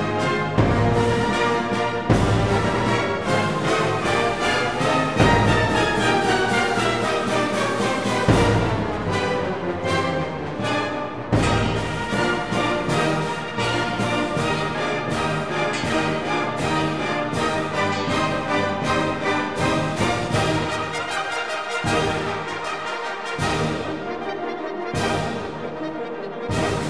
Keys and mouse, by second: 1.1 ctrl+r, 3.8 ctrl+r, 7.2 ctrl+r, 10.5 ctrl+r, 12.8 click, 15.1 ctrl+r, 17.2 click, 17.4 ctrl+r, 19.1 click, 19.4 ctrl+r, 22.8 ctrl+r, 23.7 click, 26.7 ctrl+r.